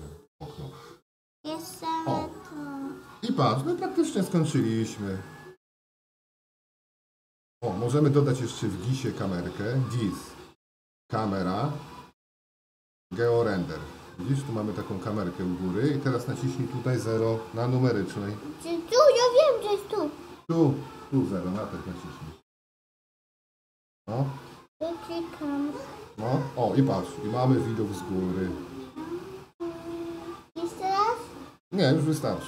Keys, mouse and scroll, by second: 1.5 Tab, 4.6-9.1 middle drag, 9.1-15.2 drag, 15.2 middle click.